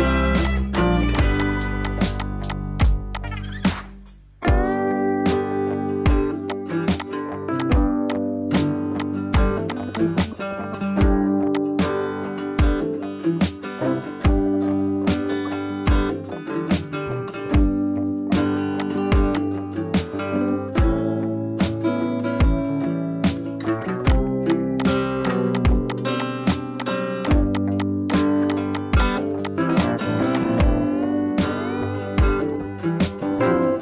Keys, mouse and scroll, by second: 10.5 [, 10.7 [, 11.5-18.4 drag, 31.1 scroll down 1, 31.7 scroll down 1, 33.7 right click.